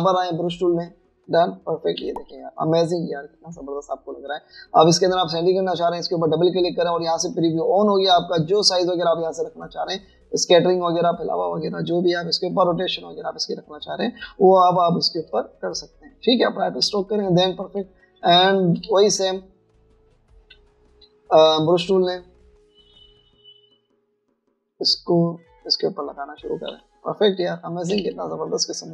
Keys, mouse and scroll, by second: 0.1-1.0 typing, 2.8-3.6 typing, 6.3 double click, 15.8 space, 17.4 space, 19.1 alt+scroll down 1, 21.3 typing, 22.5 typing, 27.5-28.9 typing, 28.3 alt+scroll down 1.